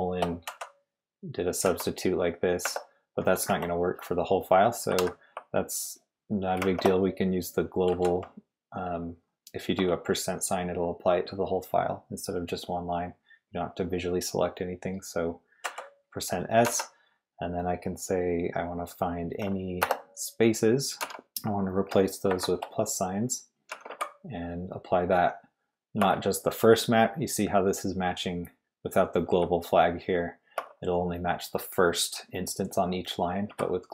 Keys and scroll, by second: 0.4-2.6 typing, 3.5 Escape, 5.0 shift+;, 6.6 shift+5, 7.9 s, 9.7 BackSpace, 15.6 s, 16.6 /, 19.8 space, 21.0 /, 22.3 shift+=, 23.4-24.4 typing, 26.0 BackSpace, 29.3 g, 30.5 BackSpace, 33.5 g.